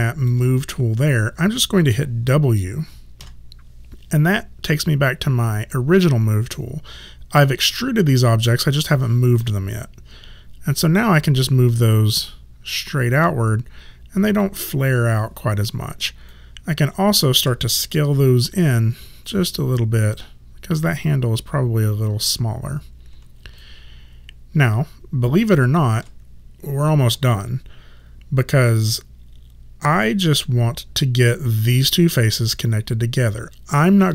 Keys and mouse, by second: 3.3 w, 11.3 click, 16.4 alt+click, 18.1 r, 19.1 click, 23.7 alt+click.